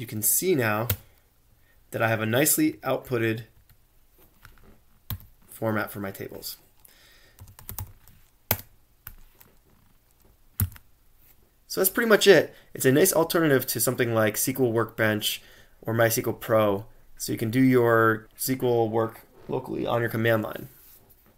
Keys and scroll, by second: 0.9 Return, 1.2 typing, 10.4-11.1 typing.